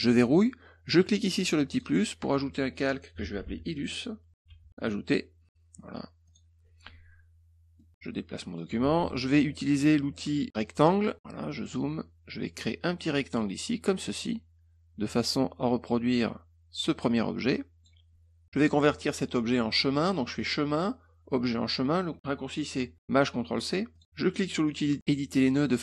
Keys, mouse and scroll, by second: 1.7 click, 2.8-4.3 typing, 4.7 click, 6.2 click, 7.8 middle click, 10.7 click, 11.6 middle click, 13.4-17.8 drag, 20.4 click, 23.9 click, 24.6 click.